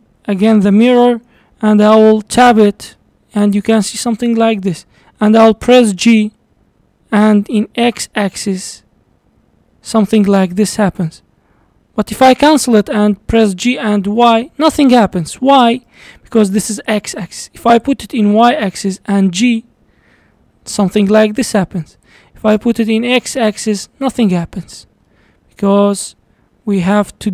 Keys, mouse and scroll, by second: 2.5 Tab, 3.0-6.1 middle drag, 6.1 g, 13.4 g, 17.7 click, 18.3 click, 19.2 g, 22.9 click, 25.1 middle click, 25.6-26.0 scroll down 1, 26.6 g.